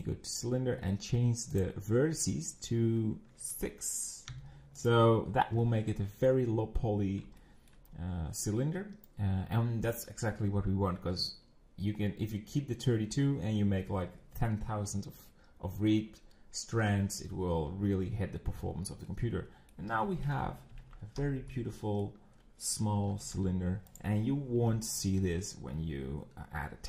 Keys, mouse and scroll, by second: 1.6-4.6 drag, 7.4 shift+middle click, 7.9-10.0 scroll, 19.1-20.8 middle drag, 21.2 scroll, 21.5-23.0 middle drag, 23.0 g.